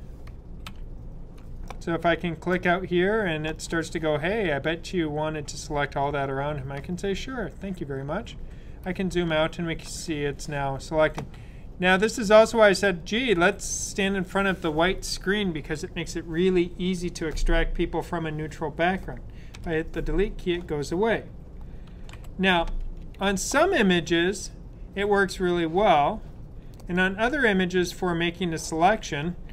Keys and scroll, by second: 0.6 super+-, 0.6 typing, 22.1 super+d.